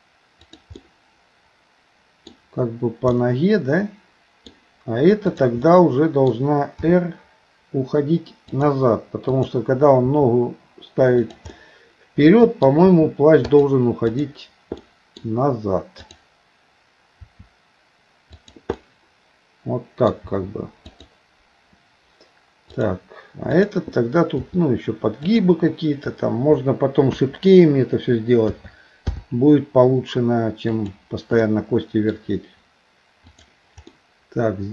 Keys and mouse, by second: 0.8-2.3 middle drag, 3.2-4.5 middle drag, 5.3 click, 5.7 middle click, 6.8 r, 9.3 click, 10.1 r, 11.5-12.7 middle drag, 12.9 r, 14.2 click, 14.8 middle click, 16.0 click, 17.2 r, 18.8-20.1 middle drag, 22.7 click, 24.4 r, 27.1 KP_1, 28.5 a, 29.1 i, 30.8 click, 31.4 middle click, 33.3 click, 33.9-34.7 middle drag.